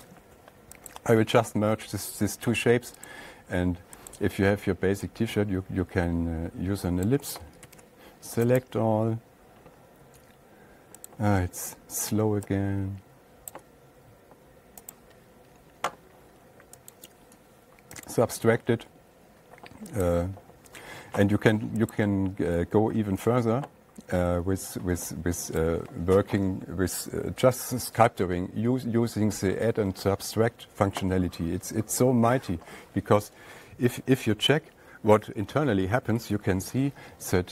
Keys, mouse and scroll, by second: 3.5 click, 4.6 click, 7.5 click, 8.1 ctrl+a, 9.0 right click, 11.6 click, 14.0 click, 15.4 right click, 17.4 click, 18.6 click, 26.1 click, 28.2-31.2 drag, 34.9 F8, 36.8 ctrl+a.